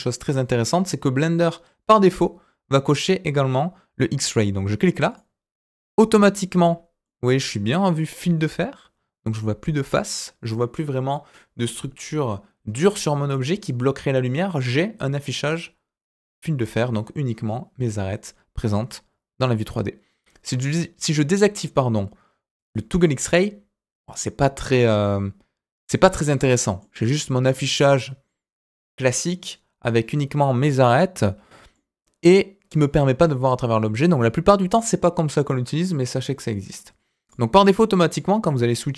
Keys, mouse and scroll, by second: 5.1 click, 6.7-7.0 scroll down 2, 7.0 middle click, 22.5 click, 23.2-26.8 middle drag, 26.9-30.1 scroll up 2, 30.9-31.3 scroll down 2, 31.3-31.7 scroll up 2, 31.7-36.1 middle drag, 37.2 click, 37.6 click, 38.1 click.